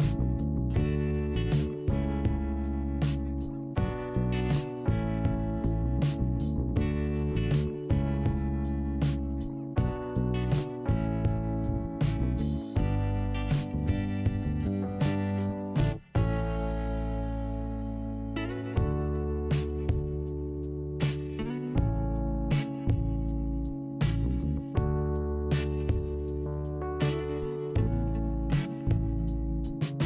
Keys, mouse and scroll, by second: 3.5 click, 4.6 click, 5.6 click, 6.4 right click, 7.6 click, 8.1 click, 9.1 9, 12.1 Return, 13.1 click, 15.2 click, 16.6 click, 16.7 click, 17.6 click, 19.7 click, 19.8 click, 20.7 click, 22.5 click, 23.5 click, 26.0 click, 27.0 click, 27.5 click, 28.0 click, 28.1 double click, 28.3 double click, 29.0 click, 29.5 click.